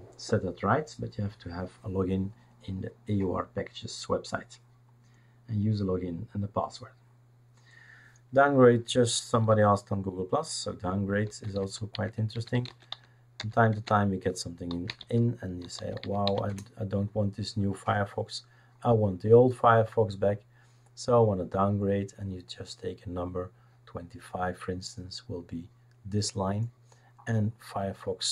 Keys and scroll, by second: 11.0-16.7 typing.